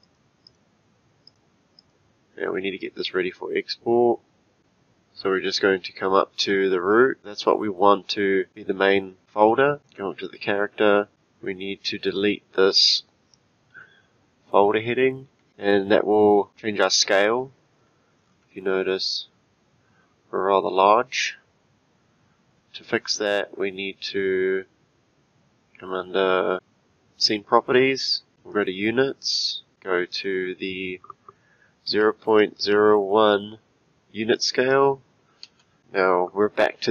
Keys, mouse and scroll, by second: 0.0 click, 0.4 click, 1.3 click, 1.8 click, 2.4-2.9 scroll down 3, 6.4 click, 9.8 click, 15.4 Delete, 17.3-18.2 scroll down 3, 18.2-21.9 scroll down 18, 26.5 click, 28.5-33.3 drag.